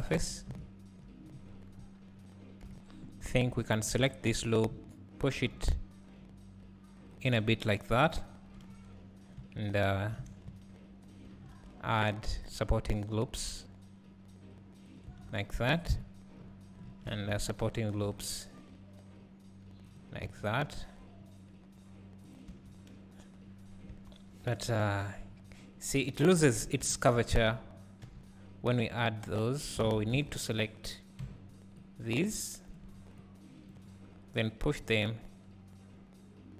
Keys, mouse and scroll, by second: 0.6 `, 1.7 KP_2, 2.6 KP_3, 3.6 `, 4.5 alt+click, 5.5 g, 9.4 `, 11.2 ctrl+r, 15.2 Tab, 15.9 KP_1, 16.9 Tab, 17.8 ctrl+r, 20.5 ctrl+r, 22.3 click, 23.9 Tab, 27.4 alt+click, 28.2 g, 29.9 alt+a, 32.7 b, 34.6 g.